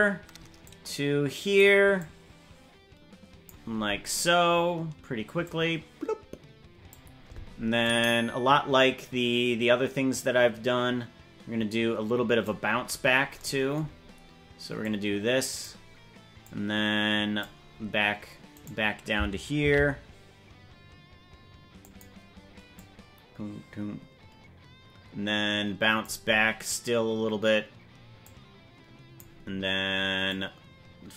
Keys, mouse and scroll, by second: 0.6 click, 2.0-3.5 drag, 5.4-6.9 drag, 7.8-12.5 drag, 12.8-13.2 scroll up 6, 14.8 click, 16.4-17.4 drag, 18.5 right click, 19.6 shift+d, 22.7-26.0 drag, 28.2-29.2 drag, 30.3 click.